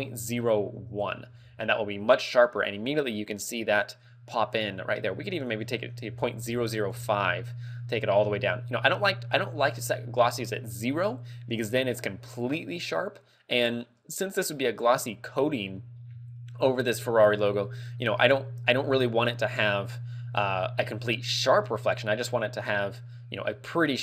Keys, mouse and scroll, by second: 5.4 ctrl+click, 7.2 ctrl+click, 22.7 middle click.